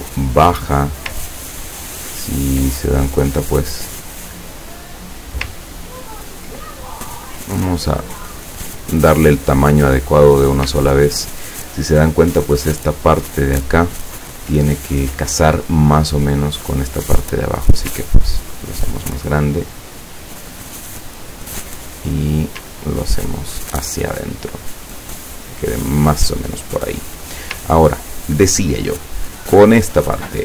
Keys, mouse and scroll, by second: 1.3-2.6 ctrl+scroll down 5, 2.8-4.9 ctrl+drag, 5.7-6.3 ctrl+scroll down 4, 8.1 click, 8.8-10.1 drag, 18.0-21.8 ctrl+drag, 22.9-26.6 ctrl+drag, 26.9 ctrl+click, 29.5 click.